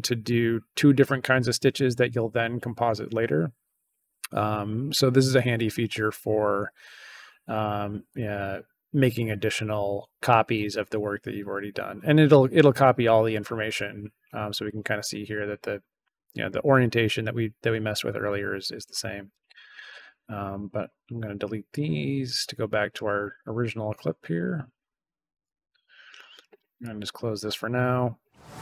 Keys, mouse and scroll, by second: 7.5 right click, 8.0 click, 14.4 click, 15.3 click, 19.2 right click, 19.8 right click, 20.6 click, 21.6 click, 22.8 right click, 23.4 right click, 24.3 click, 25.4 click, 26.7 click.